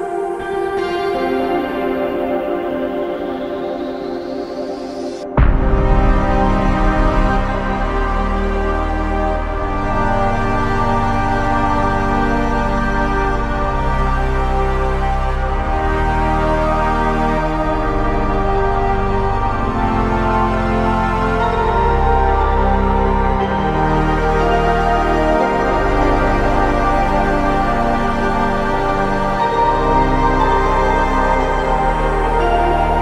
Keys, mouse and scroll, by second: 5.3 ctrl+click, 26.4 double click, 32.0 ctrl+click.